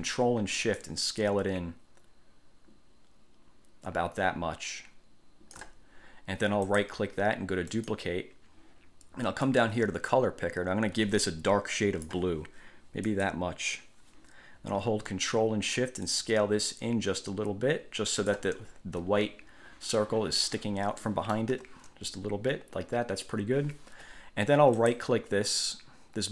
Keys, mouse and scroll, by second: 0.9-5.9 ctrl+shift+drag, 6.8 click, 7.8 click, 9.6-12.4 drag, 13.3 click, 16.2 ctrl+shift+click, 18.8-19.2 ctrl+shift+scroll up 3, 21.2 click, 21.2 right click, 21.7 1, 25.0 click.